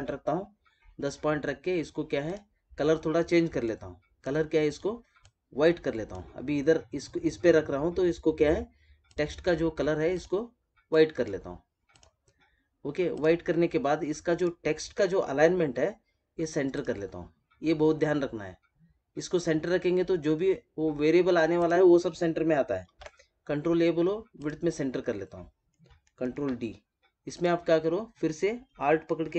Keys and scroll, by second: 22.8 ctrl+a, 26.2 ctrl+d.